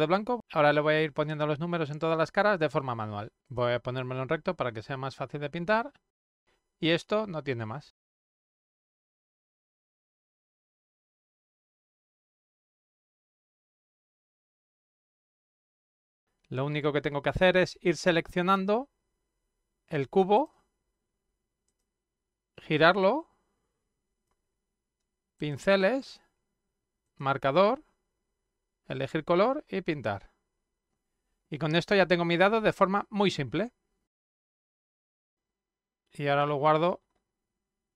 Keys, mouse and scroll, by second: 2.2 click, 2.8 click, 3.2 click, 3.8 click, 6.3 click, 7.9 click, 8.2 click, 9.4 click, 9.9 ctrl+z, 10.4 click, 10.8 click, 11.4 click, 12.3 click, 13.0 click, 14.3 click, 15.4 click, 15.5 ctrl+z, 20.4 click, 21.7 click, 22.7-24.3 drag, 25.4 click, 27.0 click, 31.5-34.3 drag, 35.2 click.